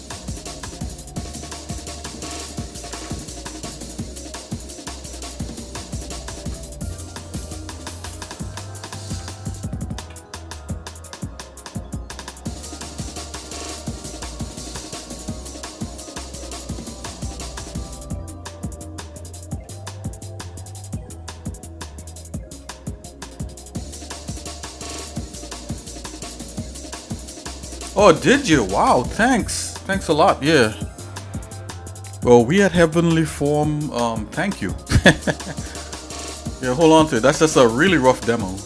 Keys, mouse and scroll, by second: 2.4 shift+middle click, 2.9 Tab, 3.6 shift+middle click, 4.2 click, 5.3 g, 6.9 click, 8.0 g, 10.0 a, 10.6-18.1 right drag, 19.2 shift+middle click, 19.9 scroll up 1, 19.9 scroll down 1, 20.1 scroll up 1, 20.7 middle click, 20.7 scroll up 1, 21.4-22.6 shift+middle drag.